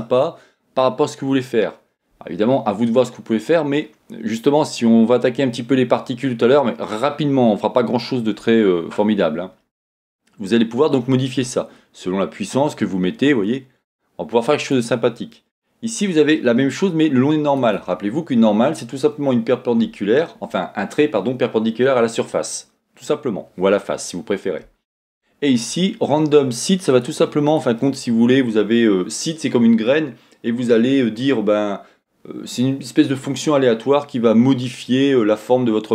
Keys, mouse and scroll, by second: 7.7-20.7 drag, 21.5-28.4 drag, 29.0-35.9 drag.